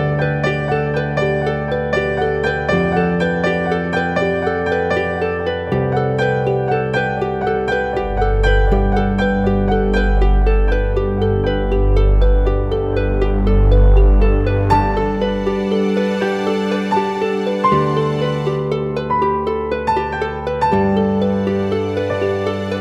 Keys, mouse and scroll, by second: 8.8 e.